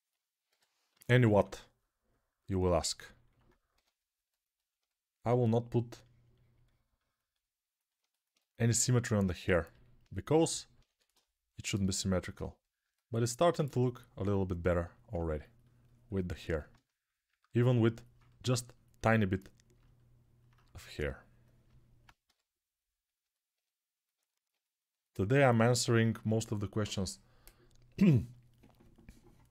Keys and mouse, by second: 0.2-1.1 typing, 3.5 ctrl+r, 4.1-14.7 drag, 10.6 1, 22.0 g.